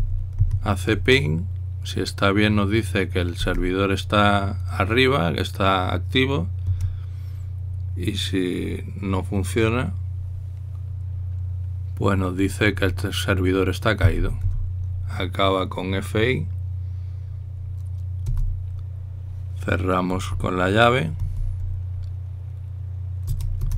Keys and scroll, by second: 0.0-1.7 typing, 4.2 Return, 7.5 Tab, 14.9 typing, 19.1 Return, 22.2 typing.